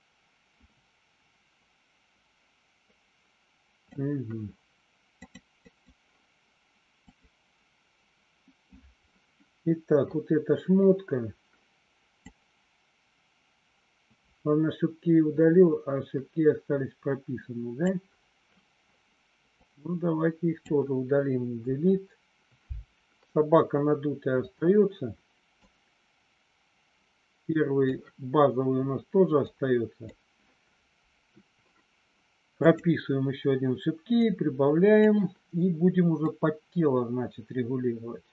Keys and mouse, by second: 5.3 click, 7.0 click, 12.3-18.0 drag, 19.5-20.6 drag, 21.5 Delete, 25.6-28.0 drag, 29.5 click, 32.7 click, 34.2 click, 36.2-38.3 drag.